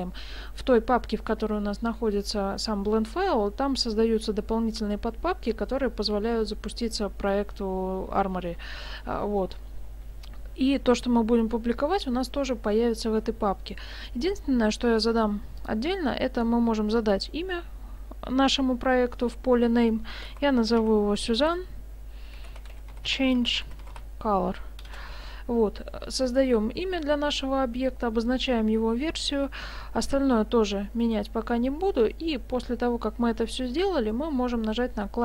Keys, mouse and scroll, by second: 15.6 click, 21.3 n.